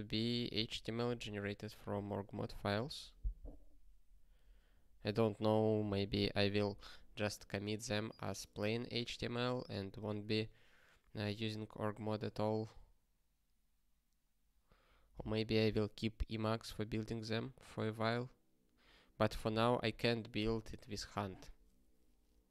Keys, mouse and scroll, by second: 20.7 click, 21.5 click.